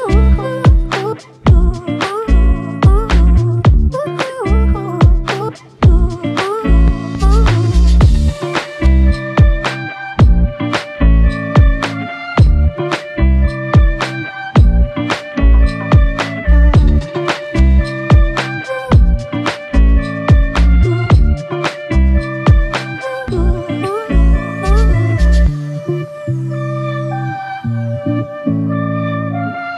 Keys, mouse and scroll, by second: 7.4 double click, 7.7 shift+click, 16.0-16.9 typing.